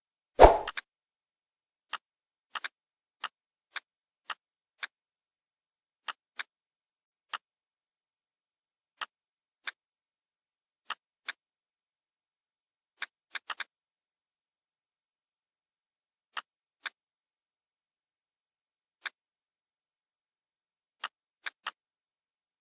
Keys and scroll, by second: 12.3 Delete, 14.9 Delete, 18.7 Delete.